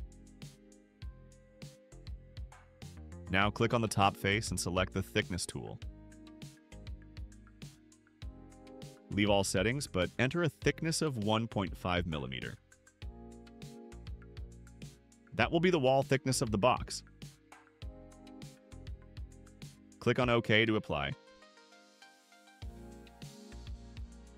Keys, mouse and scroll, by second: 2.3-3.7 drag, 4.2 click, 8.1 click, 10.0 1, 10.8 ,, 11.4 5, 12.3 click, 21.9 click.